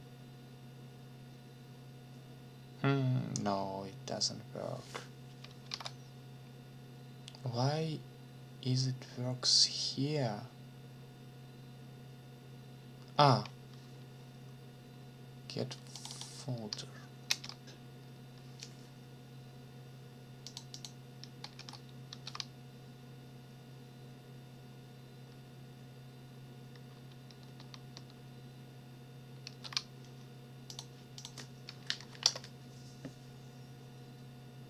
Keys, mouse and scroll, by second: 5.7 alt+Tab, 15.9 click, 17.3 ctrl+c, 20.5 click, 21.6 ctrl+v, 22.1 ctrl+s, 29.4 ctrl+s, 30.7 click, 31.2 click, 32.0 Up, 32.2 Return.